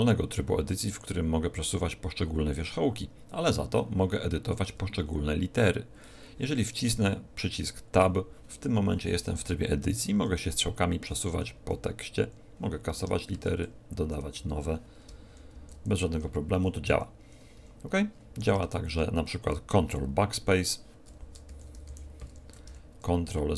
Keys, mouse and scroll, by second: 6.8 Tab, 9.7 Left, 10.1 Left, 10.9 Right, 11.3 Left, 11.5 Left, 11.9 Right, 12.3 Right, 13.3 BackSpace, 14.0 Delete, 14.4 Delete, 15.3 shift+p, 15.5 shift+k, 15.7 shift+b, 16.9 Left, 17.1 Left, 17.6 Right, 18.5 ctrl+BackSpace, 21.5 shift+p, 21.7 shift+k, 21.8 shift+b, 22.6 ctrl+Left, 23.2 ctrl+Right.